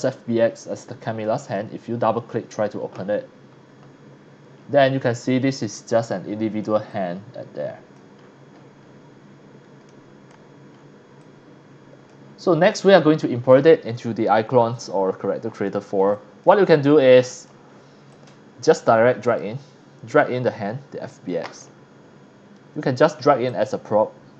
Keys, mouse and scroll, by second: 1.2 click, 1.4 click, 4.6 scroll down 1, 5.0 scroll up 1, 5.6-6.6 middle drag, 6.9-8.0 drag, 8.2-8.7 scroll up 2, 8.9-9.3 scroll down 2, 9.9-10.3 middle drag, 10.7 scroll up 1, 11.2-12.1 drag, 12.3 scroll down 1, 13.5 click, 14.7 click, 15.4 scroll down 1, 16.1 click, 16.7-17.5 shift+drag, 17.7 scroll down 5, 18.1-18.6 drag, 19.3 click, 20.2 click, 23.5 click.